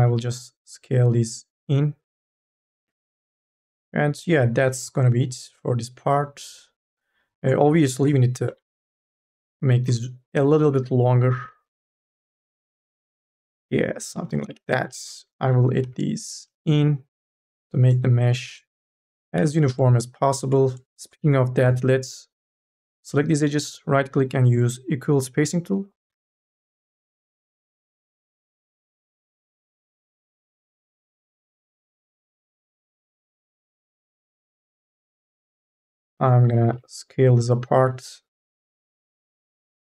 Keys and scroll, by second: 7.6 1, 8.3 KP_0, 15.2 k, 15.6 l, 18.0 3, 19.1 2, 19.6 e, 31.8 1, 32.2 e, 36.5 t, 39.4 q.